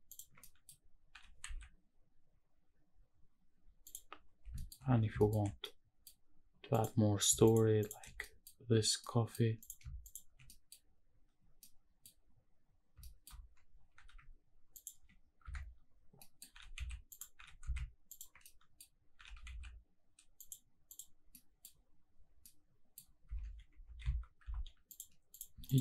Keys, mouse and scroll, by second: 0.1 ctrl+click, 0.4 middle drag, 1.1 g, 1.4 shift+z, 3.8 click, 4.1-5.2 scroll down 5, 4.5 shift+middle drag, 5.2 shift+middle drag, 5.6-6.0 middle drag, 6.7 click, 7.4 shift+click, 7.8 shift+click, 8.2 middle click, 9.0-9.3 middle drag, 10.0 shift+click, 10.4 middle click, 11.6 middle click, 13.0 shift+middle drag, 13.3-13.9 scroll up 3, 13.9 g, 14.7 ctrl+click, 15.4 KP_Decimal, 15.9-16.2 scroll down 2, 16.2 middle click, 16.5 g, 16.7 z, 17.1 click, 17.3 g, 17.6 z, 18.1 ctrl+click, 18.4-18.7 middle drag, 18.8 scroll down 2, 19.1 g, 19.5 shift+z, 20.4 click, 20.8 click, 21.3 middle drag, 21.7-22.1 scroll down 1, 22.1-22.4 scroll up 1, 22.4-22.9 middle drag, 23.0 scroll up 1, 23.4 shift+`, 25.3 click, 25.7 shift+click.